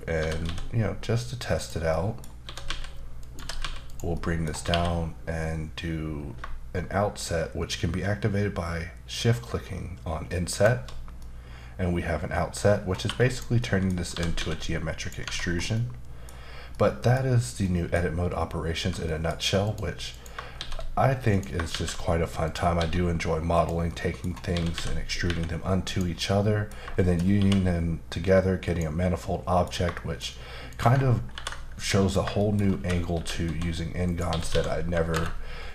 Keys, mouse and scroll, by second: 0.2 typing, 1.6 click, 1.9 middle click, 2.4-3.6 typing, 3.2 click, 3.9 click, 4.1 middle click, 4.7 q, 10.5 shift+click, 11.2 middle click, 12.7-13.0 scroll up 1, 13.0 2, 13.3 click, 13.6 middle click, 14.1 typing, 15.0 click, 15.2 Tab, 15.4 scroll down 2, 15.7 middle click, 16.7 middle click, 17.6 middle click, 18.1-18.8 scroll up 1, 18.8 Tab, 19.1 middle click, 19.6 click, 20.1 click, 20.5 shift+s, 21.3 click, 21.7 shift+a, 22.4 click, 22.8 s, 23.5 click, 23.9 middle click, 24.2 scroll up 1, 24.5-25.2 typing, 25.9 click, 26.2 middle click, 27.0 shift+middle click, 27.3 q, 28.6 click, 29.2 middle click, 29.9 shift+middle click, 30.7 click, 31.3 ctrl+b, 32.1 click, 32.4 shift+middle click, 32.5-33.1 shift+scroll down 2, 33.1-34.9 typing, 34.0 click, 35.1 KP_Enter.